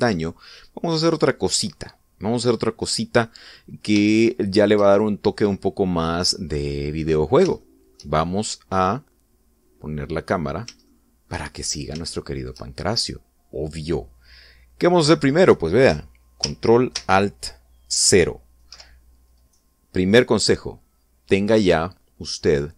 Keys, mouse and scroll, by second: 2.8-3.3 scroll down 1, 3.4-3.8 scroll up 1, 4.7-7.8 shift+middle drag, 8.2 shift+middle click, 9.1-11.4 middle drag, 11.4 shift+middle click, 12.2 shift+scroll up 3, 12.8 shift+middle click, 20.1-20.4 scroll down 2, 21.9 right click.